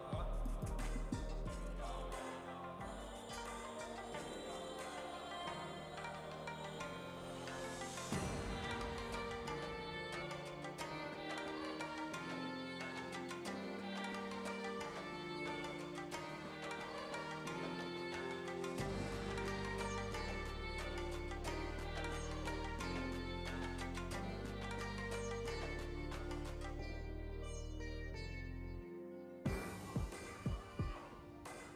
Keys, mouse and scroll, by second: 0.6-1.9 drag, 2.1 shift+d, 3.5 s, 6.9-8.4 drag, 8.7 shift+d, 10.9 ctrl+z, 11.3-12.5 drag, 12.5 alt+a, 12.9 click, 13.5 shift+d, 16.6 s, 17.8 s, 19.0 g, 22.4 click, 23.0 g, 25.4-26.4 drag, 27.3 click, 28.0 g, 29.1-30.2 drag, 30.2 ctrl+z, 30.4 ctrl+z.